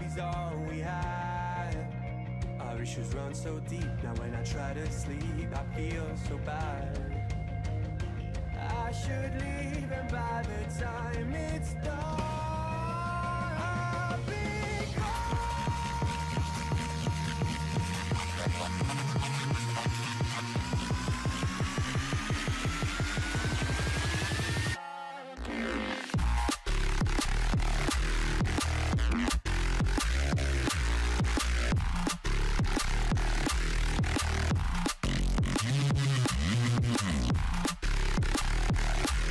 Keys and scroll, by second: 1.2 ctrl+=, 22.4 ctrl+z, 30.4 ctrl+0.